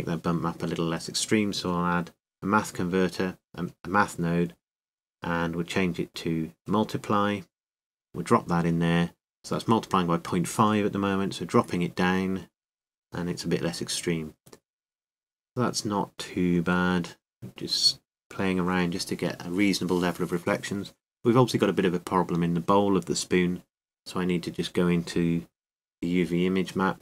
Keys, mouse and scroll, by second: 0.2-3.5 drag, 4.1-10.2 drag, 10.5 click, 12.4-21.5 drag, 23.0-24.8 drag, 24.9-26.7 drag.